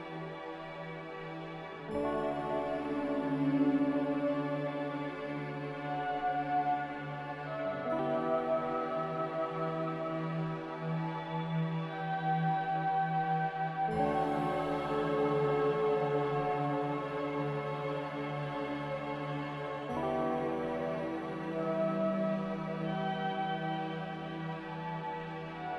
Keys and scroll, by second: 2.9 Escape, 22.9 a.